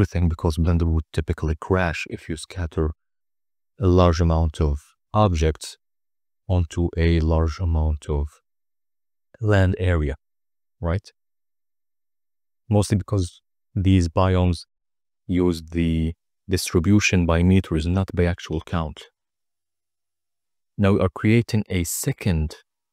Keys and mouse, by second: 0.4 click, 1.2 click, 4.2 drag, 5.5 click, 6.7-7.3 middle drag, 7.8-8.9 drag, 14.2-17.4 drag.